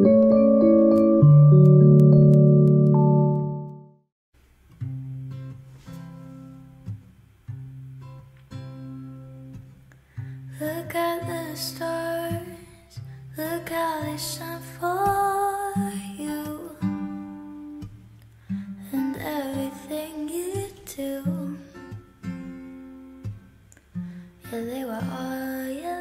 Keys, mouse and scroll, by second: 0.5 ctrl+shift+c, 4.2 Return, 4.4-5.5 typing, 6.0 ctrl+d, 6.8 Return, 7.0-9.0 typing, 11.7-12.5 typing, 15.0 ctrl+alt+shift+c, 15.3 Return, 20.2 ctrl+alt+shift+y, 20.6 ctrl+alt+shift+y, 20.9 ctrl+alt+shift+y, 21.2 ctrl+alt+shift+y.